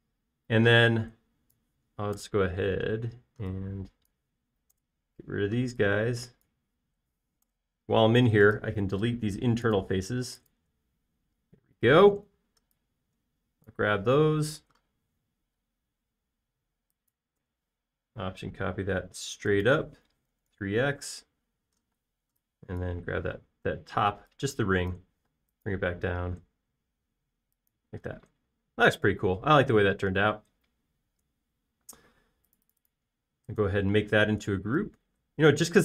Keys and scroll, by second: 3.3 BackSpace, 8.5 BackSpace, 10.1 BackSpace, 11.0 BackSpace, 11.8 BackSpace, 15.7 m, 21.2-23.0 typing, 24.3 m, 24.9 space, 26.3 m, 28.9 typing.